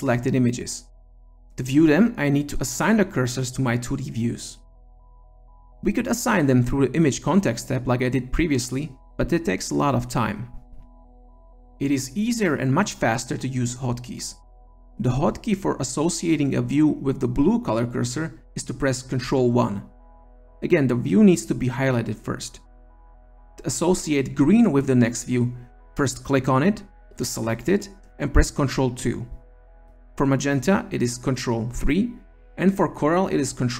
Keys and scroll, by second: 18.2 ctrl+1, 27.9 ctrl+2, 30.6 ctrl+3, 32.7 ctrl+4.